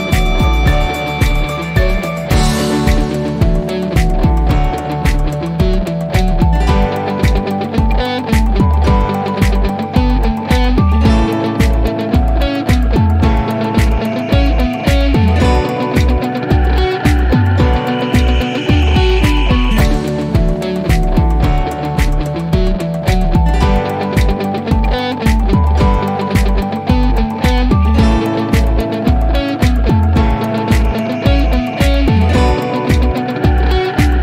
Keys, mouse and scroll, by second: 8.9 click, 14.0-16.9 drag, 21.3 typing, 22.5 Return, 24.3 click, 27.1 click, 30.7 click, 32.6 scroll up 1.